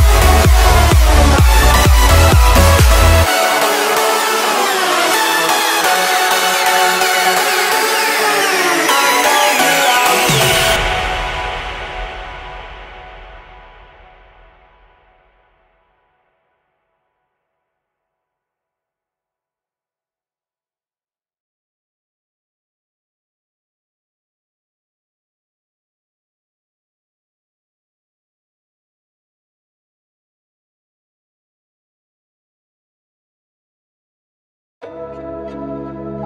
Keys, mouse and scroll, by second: 1.2 space, 1.3-2.5 scroll down 1, 3.8 p, 4.1 click, 7.5 5, 7.9 Return, 9.1 click, 9.5 space, 11.4 click, 12.5 Delete, 12.8-13.1 scroll down 1, 13.1 click, 13.4 right click, 14.4 click, 14.8 middle click, 15.3 scroll down 1, 15.9 shift+middle click, 16.5-17.4 scroll up 1, 17.9-19.1 scroll down 1, 19.1 m, 19.8 click, 20.7 Left, 21.2 click, 21.3 space, 21.4-21.8 scroll down 1, 22.0 shift+middle click, 22.6 scroll down 1, 23.0 shift+middle click, 23.7-24.5 scroll up 1, 24.5 m, 24.5 click, 26.0 Up, 26.7 click, 26.8 space, 27.5 q, 27.6 click, 28.8-30.6 typing, 30.7 click, 31.9 Up, 32.1 click, 32.5 scroll up 1, 32.8 space, 33.4 shift+middle click, 34.1-34.4 scroll down 1, 35.5 m, 36.1 click.